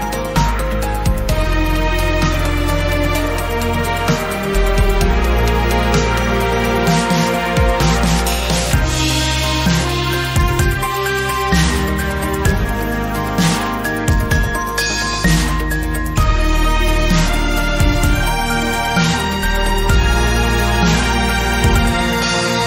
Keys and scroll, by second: 2.0 3, 3.9 Delete, 4.4 Return, 6.8 2, 15.7 ctrl+r, 18.5 Tab.